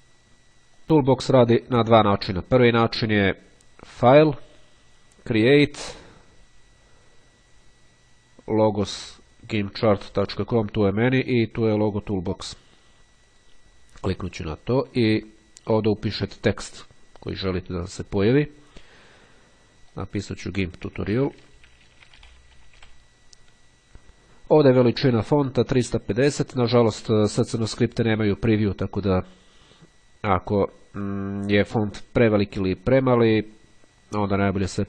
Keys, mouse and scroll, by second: 1.1 click, 12.0 click, 16.2 click, 18.5 click, 19.1 space, 21.0-23.0 typing.